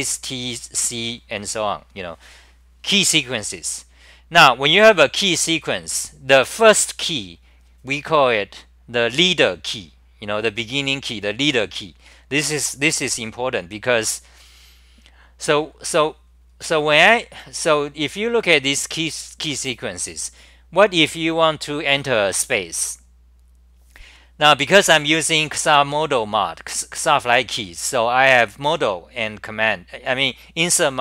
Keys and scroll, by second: 16.5-17.4 scroll down 9, 17.4-18.7 scroll down 13.